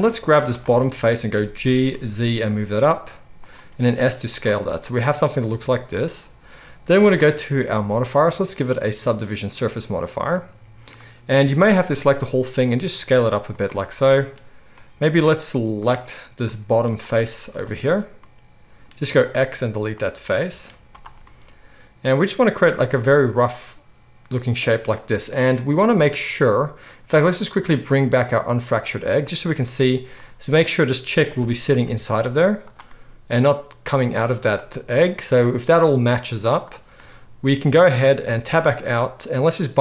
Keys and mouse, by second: 0.5 click, 0.6-8.1 middle drag, 1.6 g, 3.6 s, 8.1-13.6 drag, 11.4 a, 12.0 s, 13.6-17.0 middle drag, 17.0 click, 17.1-28.8 middle drag, 17.4 z, 19.1 x, 20.7 z, 28.8 click, 28.9-36.4 middle drag, 29.9 z, 31.4 g, 34.1 z, 36.4 click, 36.6-39.8 middle drag, 38.4 Tab.